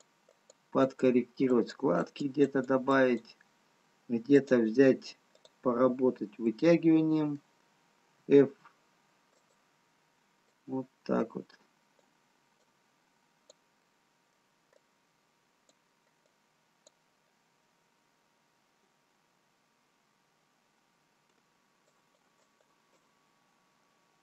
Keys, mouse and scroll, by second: 1.4 click, 2.6 click, 7.1 middle click, 8.8 f, 10.8 click, 13.0 click, 14.0 middle click, 19.0-20.1 scroll down 1, 21.9 shift+click.